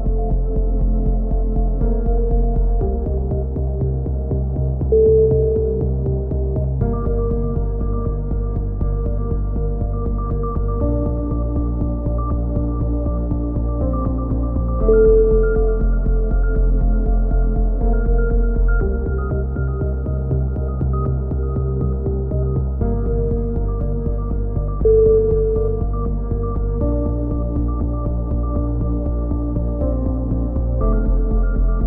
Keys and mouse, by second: 0.3 click, 0.9 click, 1.9 right click, 2.1 click, 2.5 click, 3.1 right click, 3.3 click, 4.1 click, 4.7 KP_3, 5.3 c, 6.1 right click, 6.2 click, 7.3 s, 7.9 click, 8.4 a, 8.6 z, 8.8 click, 10.4 KP_7, 10.7 z, 10.8 click, 11.5 right click, 12.0 click, 13.1 click, 14.4 a, 14.6 right click, 15.1 right click, 16.1-17.4 right drag, 16.1 f, 16.8 click, 17.2 f, 17.3 a, 17.4 z, 17.6 click, 18.3-20.0 drag, 19.2 KP_3, 19.8 z, 20.7 click, 22.0 KP_3, 22.9 click, 23.5 right click, 24.1 e, 24.8 click, 25.1 right click, 26.2 right click, 26.2 f, 26.7 right click, 27.1 KP_3, 27.5 e, 27.9-29.5 drag, 29.7 click, 30.7 KP_7, 31.0 click, 31.6 click.